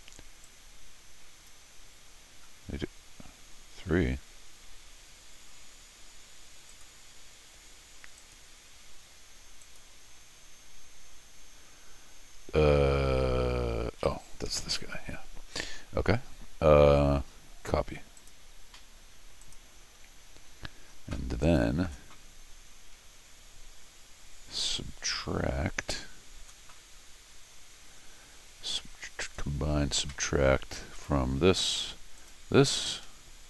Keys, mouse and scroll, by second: 0.4-1.5 drag, 6.7 click, 8.2 click, 9.6 click, 18.2 click, 19.4 click, 21.4 click, 29.2 click, 31.0 click, 32.2 click.